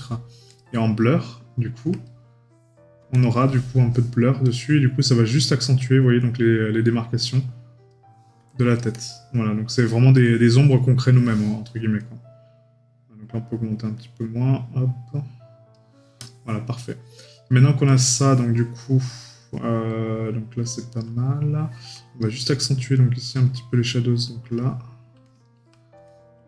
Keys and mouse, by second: 11.0 right click, 19.4 middle click, 21.6 middle click.